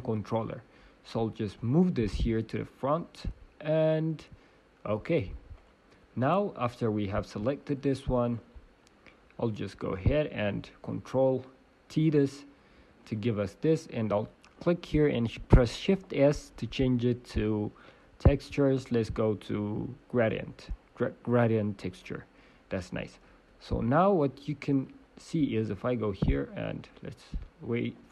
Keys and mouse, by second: 0.3 t, 1.1-4.3 drag, 1.7-4.3 middle drag, 5.6-7.5 drag, 5.6-7.5 middle drag, 7.7-9.7 drag, 8.3-9.7 right drag, 10.4-12.4 drag, 10.4 right click, 11.9 ctrl+t, 12.9 g, 13.7-22.0 drag, 25.7-27.9 drag, 25.7 right click, 26.1 right click.